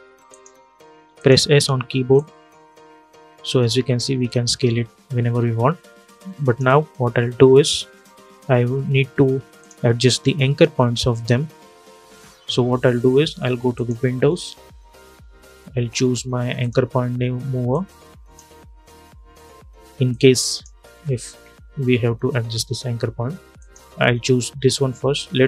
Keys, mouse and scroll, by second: 1.2 s, 1.9-7.3 drag, 13.4 click, 16.3-23.3 drag.